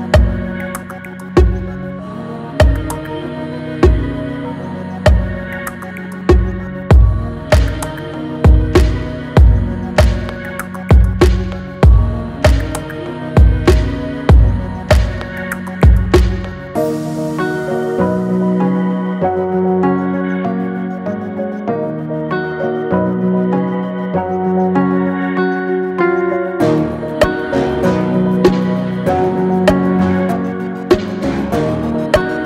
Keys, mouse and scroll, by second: 2.7-3.0 typing, 4.3 Return, 7.6 click, 12.0 click, 15.2 Left, 17.9 Left, 20.8-27.7 shift+drag, 27.5-28.8 typing, 29.5 Return.